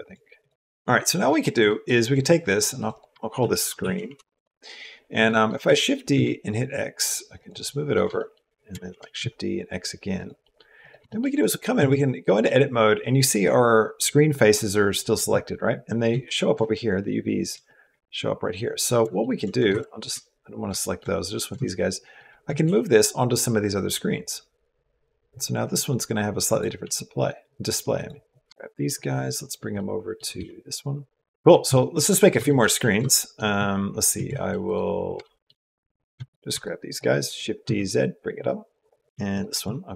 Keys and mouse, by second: 0.8 click, 1.2 shift+click, 1.2 shift+middle click, 2.7 click, 3.0 shift+middle click, 3.5 click, 3.9 e, 5.1 middle click, 5.5 shift+d, 7.5 click, 8.0 shift+click, 8.7 shift+d, 10.2 click, 10.7 right click, 10.9 shift+click, 11.2 right click, 11.6 Tab, 12.0 click, 15.9 a, 19.5 b, 20.6 shift+middle click, 21.4 shift+middle click, 22.4 g, 26.7 s, 28.4 shift+click, 28.4 shift+middle click, 28.6 Tab, 28.6 a, 28.6 b, 28.8 middle click, 29.7 middle click, 30.2 g, 31.6 shift+middle click, 32.3 shift+click, 32.8 shift+middle click, 33.3 shift+middle click, 34.1 shift+middle click, 35.0 shift+middle click, 36.4 shift+click, 36.7 shift+click, 37.1 shift+d, 39.1 click, 39.3 Tab.